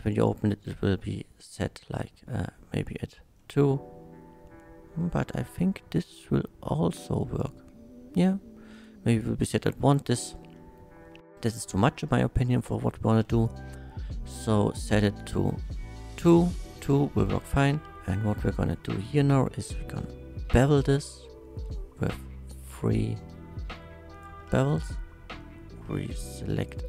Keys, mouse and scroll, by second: 0.0 click, 0.2 click, 2.9-6.0 middle drag, 7.4 click, 8.7 click, 10.5-11.8 middle drag, 13.4 click, 14.5 click, 15.1 click, 17.9 middle click, 19.8 ctrl+b, 24.1 shift+click, 25.4 shift+middle click, 25.9 3, 26.6 alt+click.